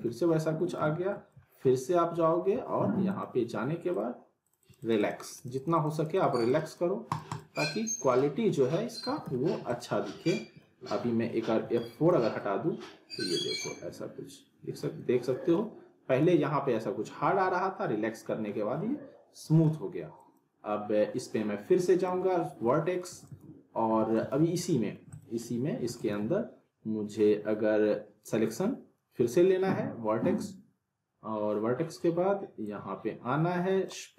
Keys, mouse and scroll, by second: 0.2-0.8 alt+middle drag, 3.1 click, 9.0 z, 9.3 alt+middle click, 9.6 click, 10.0 scroll up 1, 10.2-10.8 alt+middle drag, 11.6 F4, 12.4-13.6 alt+middle drag, 20.2 click, 22.6-23.6 alt+middle click, 23.1 alt+w, 24.0 w, 24.7 alt+middle click, 25.1 click, 25.8 alt+w, 26.0 alt+right click, 26.0 alt+w, 32.7-34.0 drag.